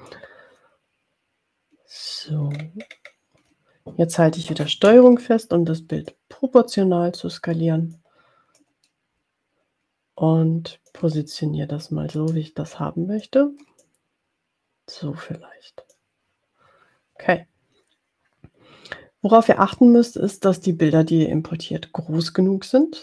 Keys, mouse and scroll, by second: 0.0-2.3 drag, 2.4-3.3 ctrl+scroll up 3, 6.2-8.3 ctrl+drag, 8.6-11.4 ctrl+drag, 12.4-13.6 ctrl+drag, 13.8-16.1 ctrl+drag.